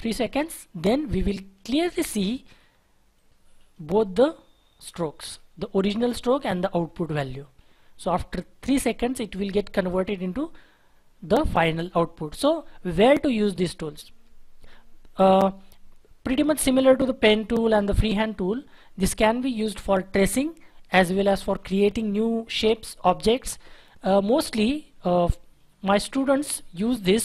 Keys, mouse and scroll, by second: 0.9 scroll up 1, 1.6-2.0 scroll down 1, 2.0-2.6 scroll up 1, 2.6-3.2 scroll down 1, 4.3-4.8 scroll up 1, 4.8-6.2 scroll down 1, 6.2-6.5 scroll up 1, 10.1-11.9 scroll down 1.